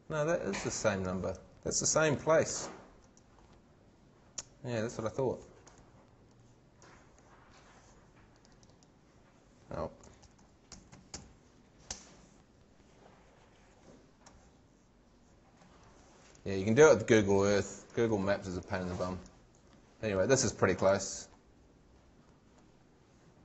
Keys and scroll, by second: 1.9 shift+super+v, 9.8-11.6 typing, 11.9 shift+Return.